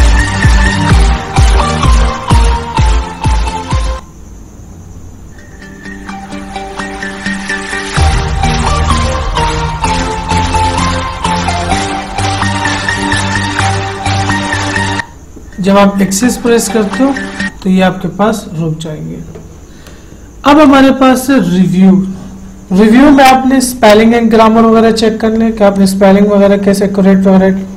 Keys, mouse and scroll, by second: 21.0 click, 26.1 click, 26.1 click.